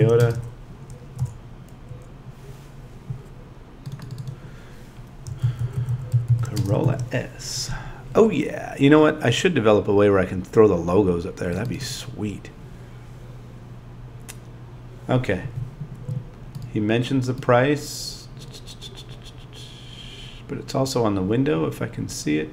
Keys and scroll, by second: 5.4 shift+c.